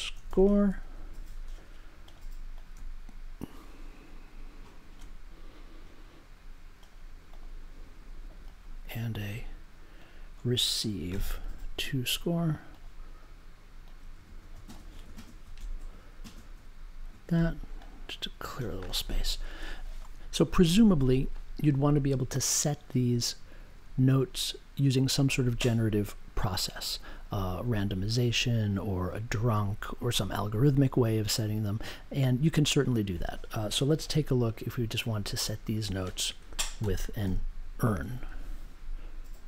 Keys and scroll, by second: 0.0-0.2 typing, 1.0 super+j, 11.1 r, 36.8 n, 37.2 u, 38.1 n.